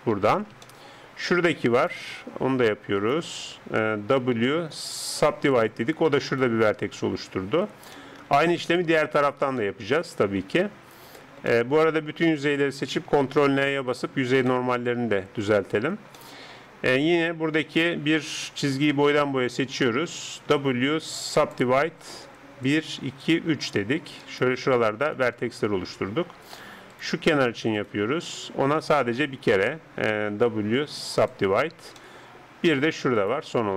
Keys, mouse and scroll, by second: 0.9-4.3 middle drag, 4.3 w, 6.4 right click, 8.0-13.4 middle drag, 12.3 a, 12.5 a, 13.4 ctrl+n, 14.5-19.1 middle drag, 17.2-20.3 right drag, 20.5 w, 22.7-25.8 drag, 24.2 right click, 30.5 w, 32.0-33.1 middle drag, 33.1-33.7 right drag.